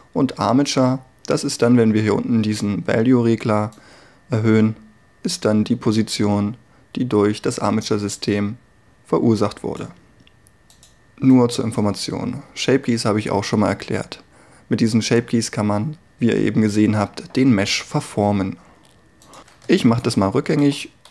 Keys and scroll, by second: 20.1 ctrl+z.